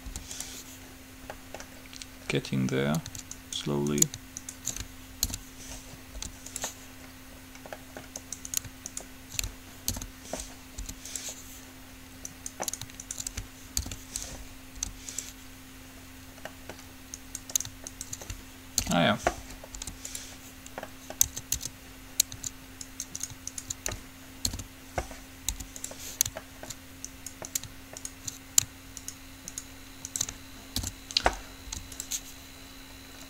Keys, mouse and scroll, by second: 0.2 u, 1.6-2.7 middle drag, 3.7 right click, 5.4 alt+p, 6.3 u, 7.7 middle click, 8.4-10.7 right drag, 10.2 alt+p, 11.0 u, 12.5-14.5 right drag, 14.0 alt+p, 15.1 u, 16.7 middle click, 17.5 click, 18.9 alt+p, 19.9 u, 21.4 Tab, 21.8 Tab, 23.0-25.5 right drag, 24.7 alt+p, 25.7 u, 26.7 middle click, 27.3-30.5 right drag, 31.0 alt+p, 31.9 u.